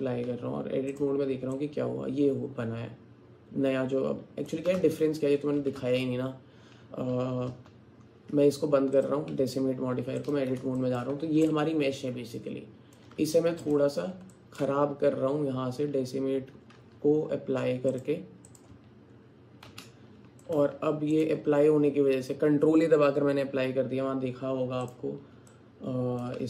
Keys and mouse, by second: 0.2 Tab, 1.6-4.5 alt+drag, 4.5 middle click, 4.8 ctrl+z, 9.0 click, 9.8 Tab, 10.8 alt+shift+click, 11.6-13.0 alt+drag, 13.2 Tab, 14.3 alt+click, 17.9 click, 19.7 ctrl+a, 20.4 alt+click, 20.7 Tab, 25.5 click.